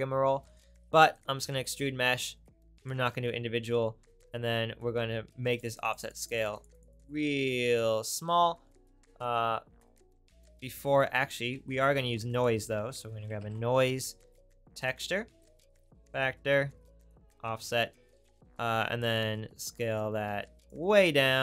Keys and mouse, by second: 1.2 right click, 3.4-5.6 right drag, 5.6-7.5 middle drag, 8.3 middle click, 11.5 shift+a, 15.5 right click, 17.1-18.2 middle drag.